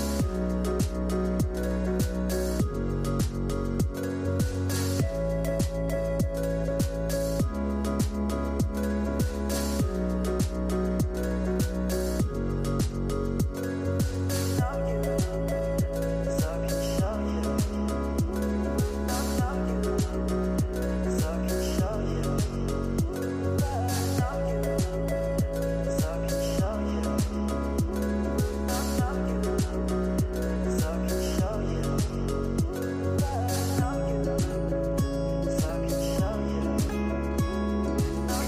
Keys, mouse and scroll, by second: 1.7 click, 2.0 scroll down 5, 4.6 click, 5.0-5.4 scroll down 6, 5.8-7.2 drag, 7.6 click, 10.5 scroll up 2, 11.2-13.3 middle drag, 13.3-15.9 scroll down 52, 15.9 shift+click, 17.0 ctrl+z, 17.3-20.4 drag, 22.0-23.5 middle drag, 23.5 click, 24.2 space, 27.1 space, 27.6-29.3 drag, 29.3 scroll down 4, 29.7-31.1 middle drag, 31.1 shift+a, 33.0 s, 35.2 click, 36.3 g.